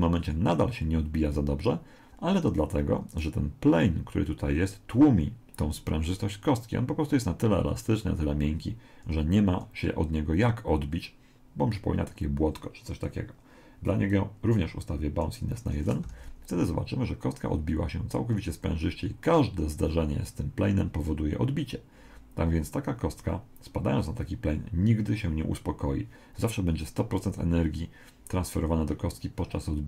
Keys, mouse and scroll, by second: 2.1 Escape, 3.1 right click, 14.1 click, 16.1 alt+a.